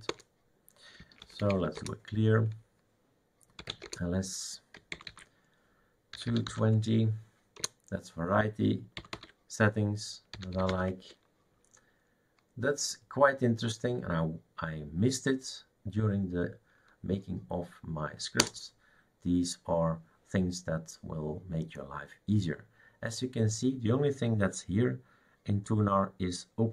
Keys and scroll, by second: 0.1 Return, 0.7-2.0 typing, 3.5-7.0 typing, 7.6 Return, 9.1-11.2 typing, 18.4 Return.